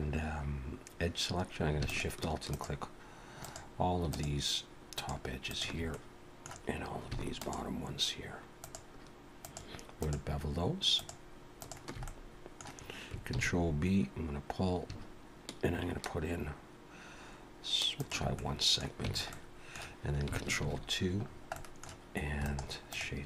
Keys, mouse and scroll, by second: 1.9-5.8 alt+shift+click, 5.9 middle click, 7.4 alt+shift+click, 8.6-11.9 alt+shift+click, 12.0 middle click, 13.3 ctrl+b, 18.3 middle click, 19.0 Tab, 19.3 middle click, 20.6 ctrl+2, 21.2 scroll down 2, 21.5 middle click, 22.4 right click.